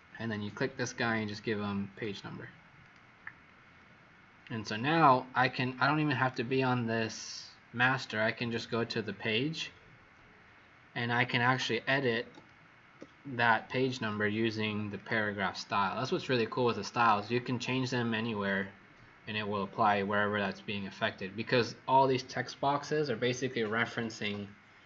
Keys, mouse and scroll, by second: 2.0 click, 8.5 click, 12.4 click, 12.9 click, 14.9 click.